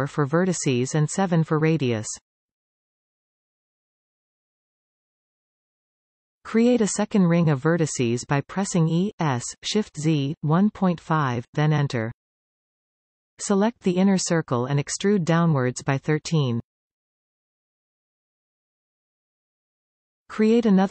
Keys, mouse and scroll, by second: 2.0-4.5 drag, 8.7 click, 10.1 e, 14.0-14.6 scroll up 2, 14.6-16.3 shift+middle drag, 16.3 alt+a, 17.4 alt+shift+click, 18.6 e.